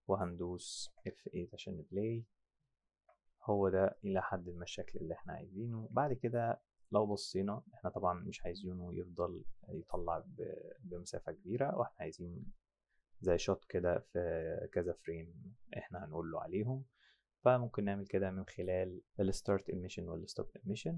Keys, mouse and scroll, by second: 0.8 F7, 3.0 F7, 3.9 click, 6.8 click.